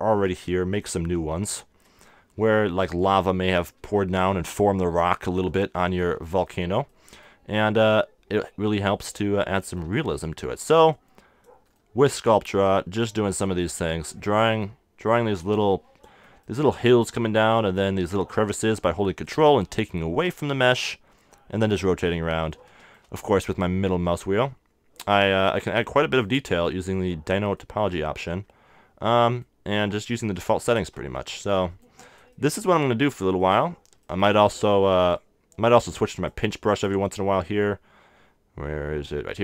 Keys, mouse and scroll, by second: 2.4-5.0 middle drag, 5.0-6.9 drag, 6.2 middle click, 7.9-9.7 drag, 10.1-12.8 drag, 12.9-15.1 middle drag, 13.5-17.0 drag, 15.2-16.4 middle drag, 17.6-20.9 drag, 22.5 middle click, 24.3-27.6 drag, 25.8 middle click, 31.4-34.7 drag, 34.7 middle click, 35.1-36.1 drag.